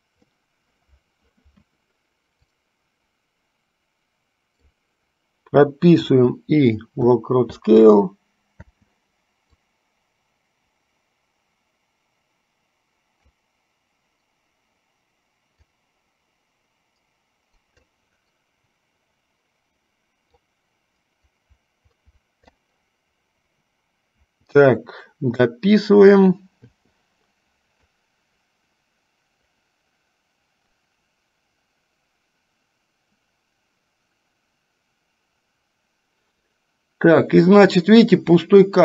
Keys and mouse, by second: 2.8-5.0 drag, 9.8-13.6 drag, 15.6-18.1 drag, 20.5-22.9 drag, 28.1-38.8 drag.